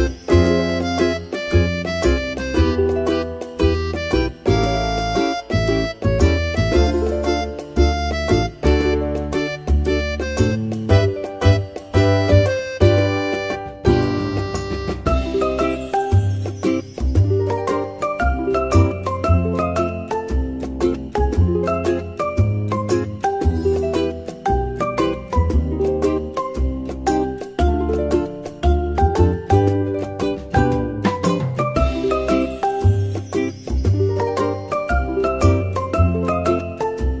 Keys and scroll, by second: 1.0 Tab, 3.7 Tab, 6.4 ctrl+z, 9.2 Tab, 14.0 ctrl+z, 17.6 ctrl+x, 18.1 ctrl+v, 18.4 Tab, 21.5 Tab, 23.7 Tab, 29.1 Tab, 35.9 Tab.